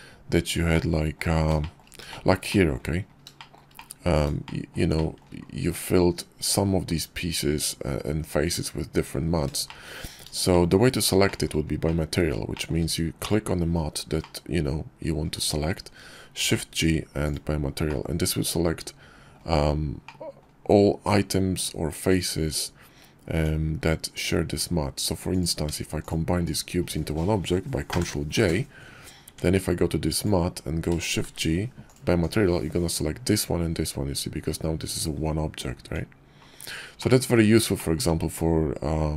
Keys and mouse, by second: 0.6 click, 1.5 shift+middle click, 1.9 shift+middle click, 2.1 shift+click, 2.3 shift+click, 3.2 shift+click, 3.6 click, 4.3 shift+click, 4.8 shift+middle click, 9.5 shift+middle click, 10.1 shift+middle click, 10.4 shift+click, 10.6 shift+middle click, 11.1 shift+middle click, 11.7 middle click, 12.4 shift+middle click, 13.0 click, 14.0 middle click, 16.2 shift+g, 17.7-19.2 middle drag, 19.9 click, 23.2 Tab, 25.1 click, 25.9 shift+click, 27.7 ctrl+j, 29.1 Tab, 30.0 click, 31.1 shift+g, 35.7 Tab, 36.8 drag, 37.6 shift+middle drag.